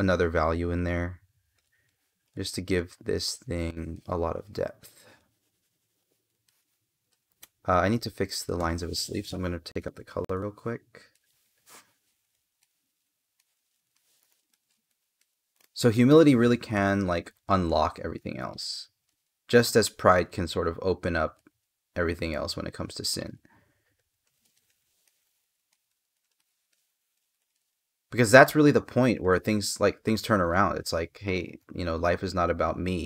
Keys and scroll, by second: 3.7 space, 6.2 space, 7.8 space, 13.7 space, 24.8 space.